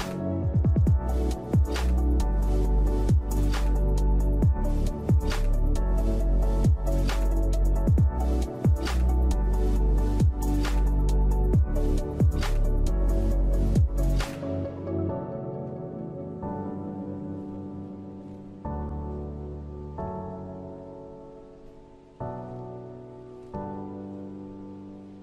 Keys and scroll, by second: 5.4 v, 6.8 3, 7.7 5, 8.9 typing, 9.3 Return, 13.6 typing, 13.9 Return, 19.4 shift+Left, 19.6 shift+Left, 25.0 typing.